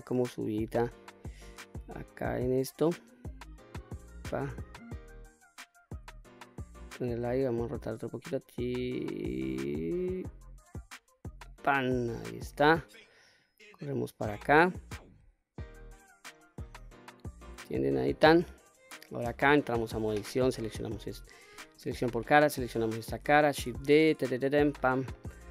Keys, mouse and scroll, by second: 0.5-2.0 drag, 2.9 click, 4.8 click, 7.5 r, 11.0 click, 11.5-12.2 middle drag, 13.1-15.5 drag, 16.1-17.7 middle drag, 17.7 scroll up 1, 18.1-19.5 middle drag, 19.5 Tab, 20.1 click, 21.5 3, 21.8 click, 22.3-22.8 middle drag, 23.3 shift+d, 24.4-24.9 right drag, 24.9-25.5 middle drag.